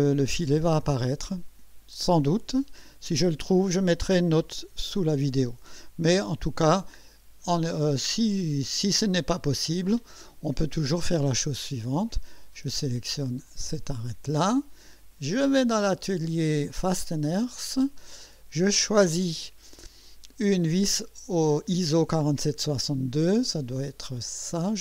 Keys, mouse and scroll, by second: 6.5 click, 8.7 click, 9.3 space, 11.8 click, 13.9 click, 15.3 click, 16.8 click.